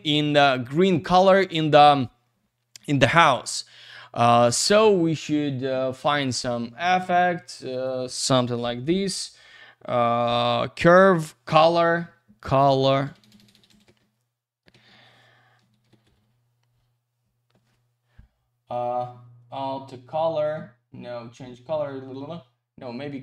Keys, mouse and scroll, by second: 7.7 click, 7.8 click, 13.0 BackSpace, 15.6 typing, 17.4 typing.